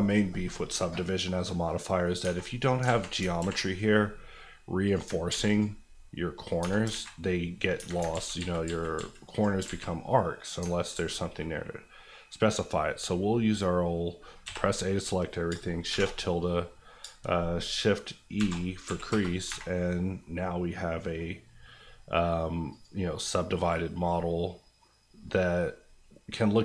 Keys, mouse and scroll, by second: 2.2 Tab, 2.8 alt+z, 3.4 ctrl+r, 3.6 click, 5.1 ctrl+click, 5.3 ctrl+r, 5.5 click, 6.6 Tab, 6.9 alt+z, 7.7 Tab, 8.1 ctrl+z, 9.6 alt+z, 10.6 alt+z, 12.6 scroll down 1, 14.4 a, 15.5 shift+a, 15.9 shift+`, 17.0 shift+`, 18.3 shift+e, 18.8 KP_1, 19.1 KP_Enter, 19.4 Tab, 19.8-20.2 scroll down 1, 20.2 middle click, 22.7 click, 23.8 scroll down 1, 24.1 middle click, 24.8 scroll up 1, 26.5 click.